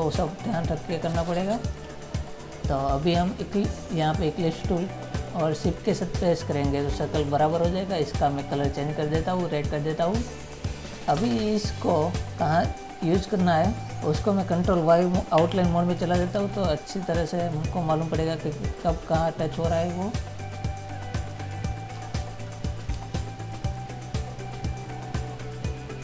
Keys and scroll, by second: 15.5 ctrl+y, 16.3 ctrl++, 23.1 space.